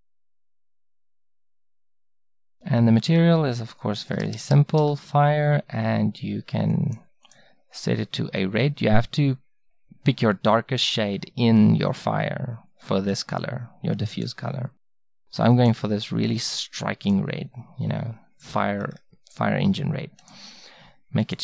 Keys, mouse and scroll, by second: 1.5-3.8 drag, 6.7-11.0 drag, 15.6-17.3 drag, 17.3-21.4 middle drag.